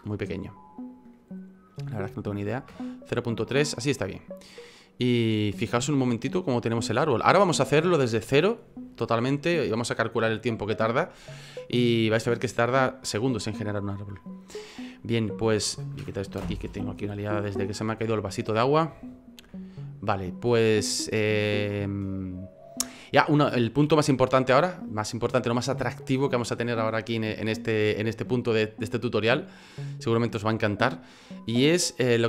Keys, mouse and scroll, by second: 4.9 middle click, 19.4 F9.